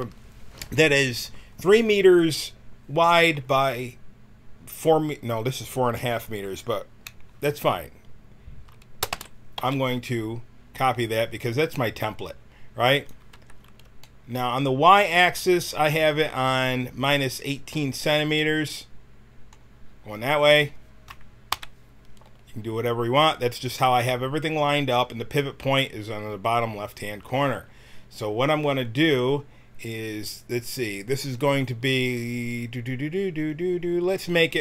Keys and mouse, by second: 9.1 shift+d, 13.4 Tab, 18.3 middle click, 19.1 middle click, 21.5 KP_1.